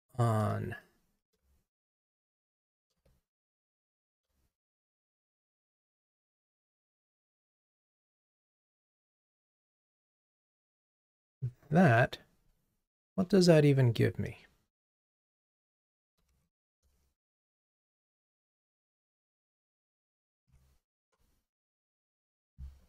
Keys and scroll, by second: 17.8 super+c, 20.1 super+x, 21.1 ctrl+Tab.